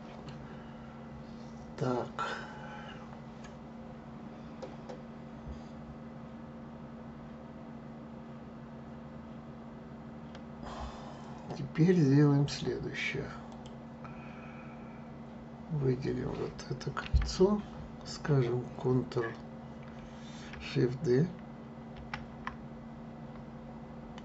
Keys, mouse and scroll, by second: 11.4-13.5 middle drag, 13.5 click, 17.0 a, 21.9 shift+d.